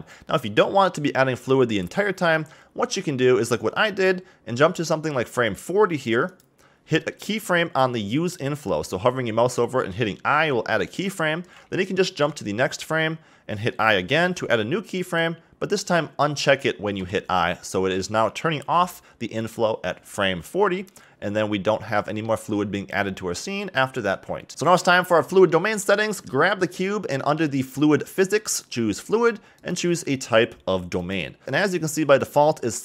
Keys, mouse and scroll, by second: 6.3 click, 12.2 Right, 15.0 click, 18.8 Left, 19.4 Right, 21.4-21.9 scroll down 1, 21.9-24.5 middle drag, 24.5 click, 25.5-26.6 middle drag, 26.6 click, 28.5 click, 29.6-31.4 drag, 32.2-32.8 drag.